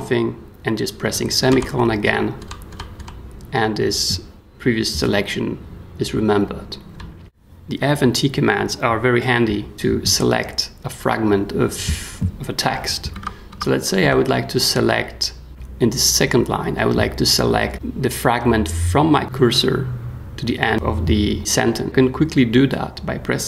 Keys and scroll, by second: 1.5 ;, 2.4 ;, 6.9 k, 13.1 w, 14.0 b.